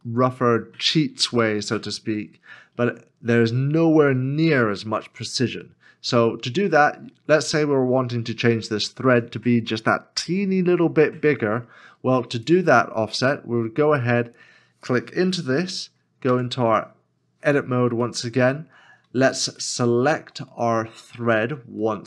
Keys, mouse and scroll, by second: 0.2 shift+middle click, 12.9 shift+middle click, 13.1 scroll up 1, 16.3-18.0 scroll, 18.0 Tab, 18.0 middle click, 19.7 shift+middle click.